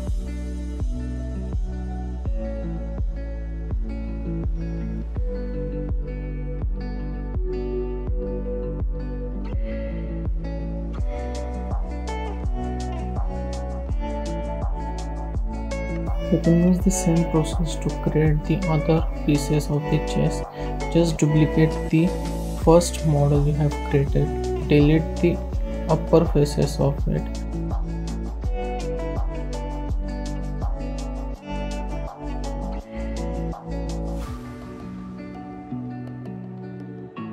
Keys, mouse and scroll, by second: 0.7 click, 1.3 click, 2.4 click, 3.1 scroll up 1, 3.4-4.9 middle drag, 6.5-6.8 scroll up 2, 7.0-7.3 shift+middle drag, 7.3 click, 7.4-8.9 right drag, 8.9 scroll up 2, 9.1-10.9 middle drag, 10.9-11.5 scroll down 4, 11.5-12.0 middle drag, 12.0 scroll down 1, 12.2-13.2 middle drag, 13.2-13.6 scroll up 2, 13.3 shift+middle drag, 13.6 click, 13.8-14.3 right drag, 14.3 click, 14.5 scroll down 2, 14.7 shift+middle drag, 15.0-15.4 scroll up 2, 15.9 click, 16.1-17.6 middle drag, 19.9 click, 21.5 shift+d, 22.7 click, 23.0 scroll up 1, 23.2 shift+middle click, 23.5 scroll down 1, 23.7-24.1 shift+middle drag, 24.1 Tab, 24.3-24.6 scroll up 2, 24.6 click, 25.8 x, 27.7 ctrl+z, 28.4 click, 28.6-28.9 scroll up 2, 28.9 scroll down 3, 29.4 click, 31.8 scroll up 2, 32.1 shift+middle click, 32.4-32.7 scroll up 7, 33.1 alt+click, 33.5 scroll up 1, 33.6 scroll down 2, 34.0 e, 35.4 scroll down 3, 36.3 click, 36.7-37.3 scroll down 7.